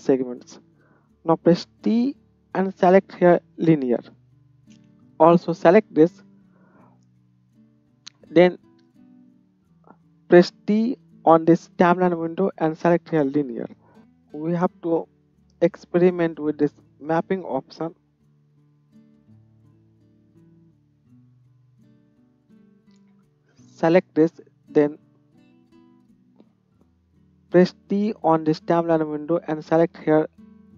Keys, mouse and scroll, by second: 1.8 t, 4.6 space, 5.2-14.0 middle drag, 11.0 t, 14.0-30.7 drag, 25.0 t.